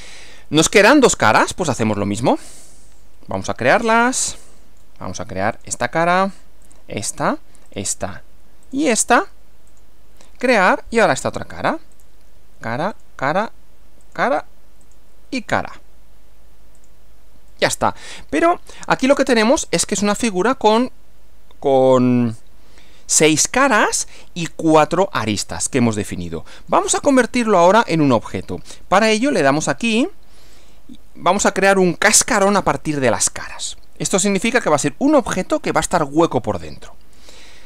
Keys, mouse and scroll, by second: 2.6 click, 3.9 click, 4.5 middle click, 5.5 click, 6.7 ctrl+click, 7.7 ctrl+click, 8.7 ctrl+click, 9.7 click, 10.5 middle click, 11.9 click, 13.0 ctrl+click, 14.0 ctrl+click, 14.8 ctrl+click, 16.8 click, 17.5-20.5 middle drag, 21.5-24.3 middle drag, 24.4-26.2 middle drag, 27.0 middle click, 30.5 click, 34.8-36.5 middle drag, 36.6 middle click.